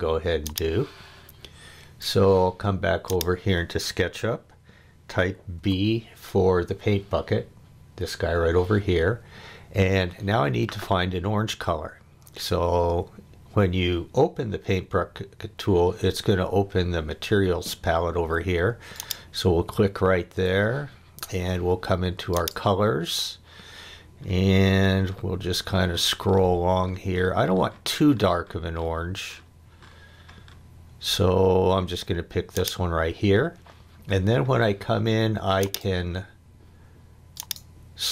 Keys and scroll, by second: 5.5 b.